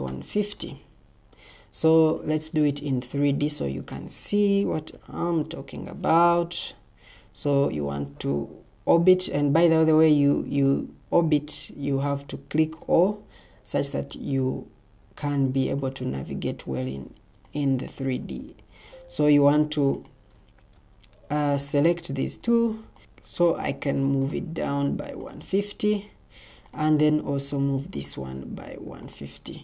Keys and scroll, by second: 0.0-0.2 typing, 5.1 typing, 6.2 o, 18.3 Escape, 18.9 Escape, 22.4 ctrl+d, 23.0 ctrl+d, 25.8 Escape, 27.4 ctrl+d.